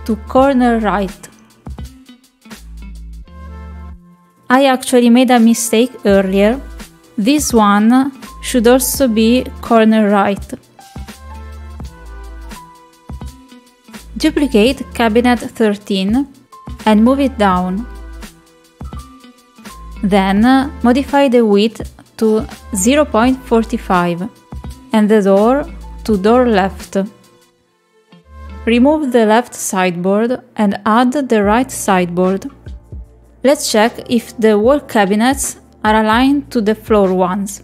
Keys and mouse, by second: 1.0-2.7 drag, 4.8 middle click, 5.6 shift+middle click, 7.7-8.7 drag, 9.3 middle click, 10.6 middle click, 12.3-13.3 drag, 17.0 click, 25.2-26.2 drag, 27.8 click, 30.8 middle click, 35.6 click, 36.6-37.6 drag.